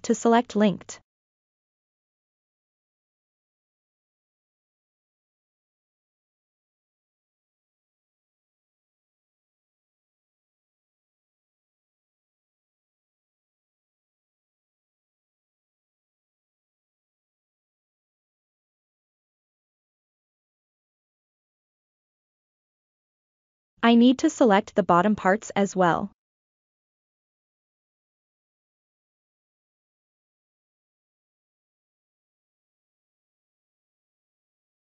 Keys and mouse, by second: 0.6 l, 1.1-1.9 middle drag, 2.3 click, 2.6-3.3 middle drag, 3.7 click, 4.3 middle click, 5.1 click, 5.5 middle click, 6.7 click, 8.7 click, 9.6 click, 10.5 click, 11.0 click, 11.5-14.6 middle drag, 15.2 click, 15.7-16.9 middle drag, 16.9 click, 17.5-18.7 drag, 18.7 middle click, 19.5 click, 20.2 click, 20.8 middle click, 21.4 click, 22.0-23.9 middle drag, 24.5 click, 24.9 middle click, 25.8 click, 26.3-28.6 middle drag, 29.6 click, 29.9 middle click, 31.1 click, 31.8 click, 32.6 click, 33.0 middle click, 33.7-34.8 middle drag.